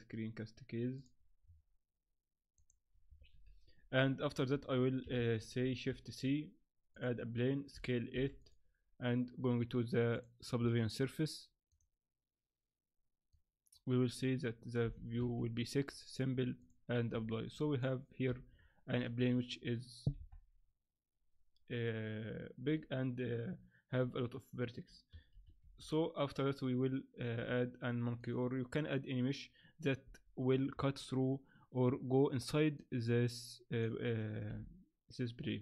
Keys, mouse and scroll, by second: 3.3 n, 4.5 shift+a, 5.6 shift+c, 5.9 shift+a, 8.1 s, 9.4-10.1 scroll down 4, 10.1 click, 10.1 scroll down 1, 10.7 click, 13.3 click, 14.1 click, 15.9 click, 16.6 click, 17.2 Tab, 17.5 middle click, 18.2-18.5 scroll up 2, 18.3 Tab, 18.5-19.1 scroll down 4, 18.9 Tab, 19.2 Tab, 20.2 KP_1, 25.3 shift+c, 25.6 shift+a, 30.0 z, 32.8 click, 34.5 r.